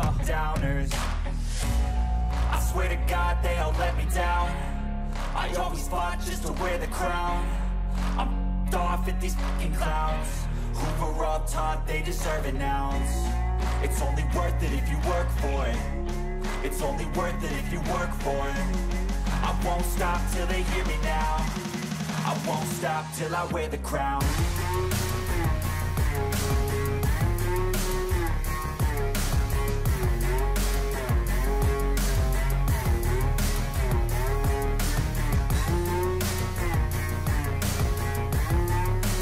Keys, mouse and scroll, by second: 4.6-8.2 typing, 16.6 ctrl+a, 19.7 ctrl+d, 19.9 ctrl+click, 20.1 ctrl+double click, 24.3 ctrl+a, 26.6 ctrl+a, 26.9 ctrl+d, 33.7 double click.